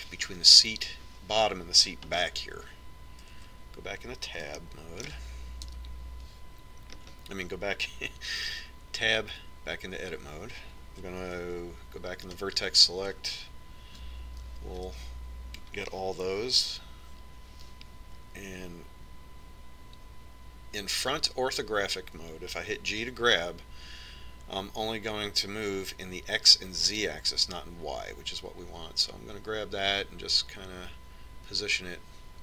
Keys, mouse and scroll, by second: 3.7-5.7 middle drag, 4.9 Tab, 7.2 KP_1, 8.2-10.5 middle drag, 12.9 ctrl+Tab, 16.4 l, 24.6 g.